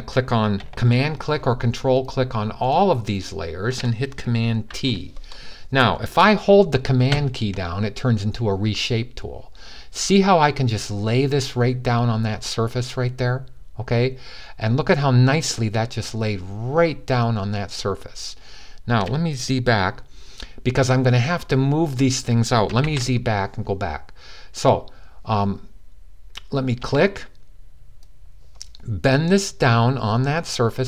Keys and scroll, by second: 4.4 super+t, 22.6 super+z.